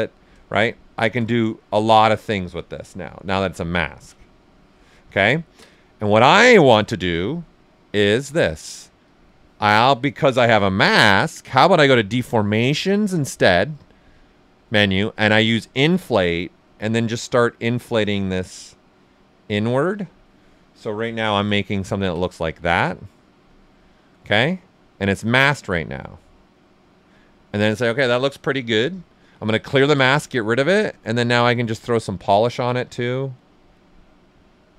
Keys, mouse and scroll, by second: 0.1 ctrl+z, 3.0 ctrl+alt+click, 5.0 ctrl+right click, 5.7 ctrl+alt+right click, 9.0 click, 12.0-21.2 drag, 21.2 ctrl+h, 21.8 ctrl+right click, 23.5 alt+right click, 24.3 right click, 29.2-30.6 ctrl+drag, 30.6 click, 31.8 click.